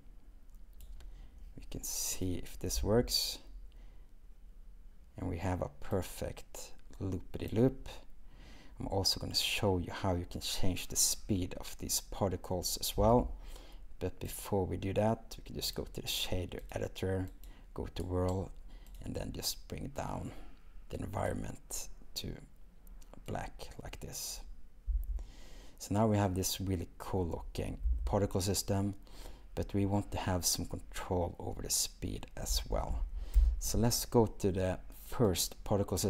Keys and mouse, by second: 2.2 click, 3.0 space, 13.0 space, 14.4-15.8 drag, 16.7-17.5 drag, 25.1 space, 27.9 n, 32.5 space, 35.3 click.